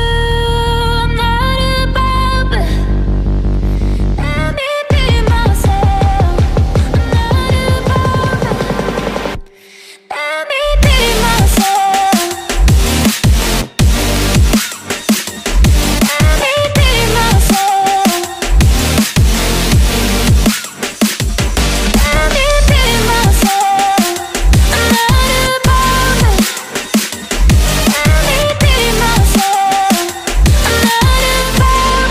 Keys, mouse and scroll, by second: 1.1 right click, 3.6 Delete, 16.8 Right, 16.9 Right, 20.8-22.0 typing, 30.0 ctrl+scroll down 1.